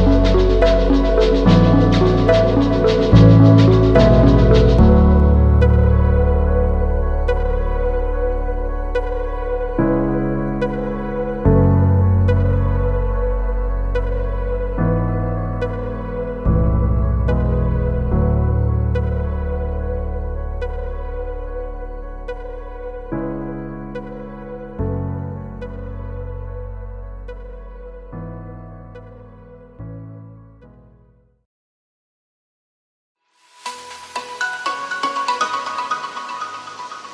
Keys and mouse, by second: 0.6 shift+click, 1.0 n, 4.6 a, 15.4 a, 16.1 Tab, 16.6 shift+middle click, 16.8 click, 18.6 click, 20.9 click, 23.3 click, 24.0 shift+middle click, 25.2 click, 25.8-26.2 shift+middle drag, 27.3 shift+middle click, 27.5 a, 28.1 a, 28.3 Tab, 29.2 a, 36.5 s.